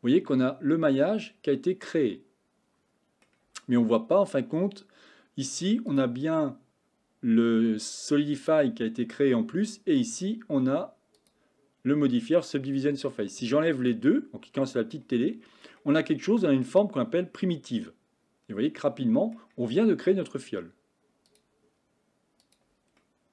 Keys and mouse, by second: 5.9 click, 8.4 click, 11.2 click, 13.8 click, 15.9-19.4 middle drag, 21.3 click, 22.5 click, 23.0 middle click.